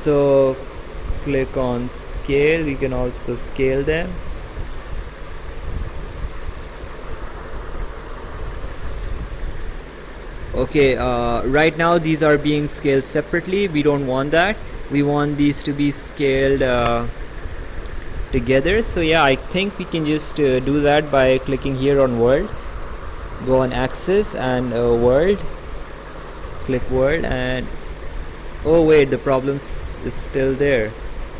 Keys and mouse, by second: 1.7 click, 3.8 ctrl+z, 5.3 click, 6.6 ctrl+z, 9.7 click, 14.4 ctrl+z, 25.3 click, 27.2 click.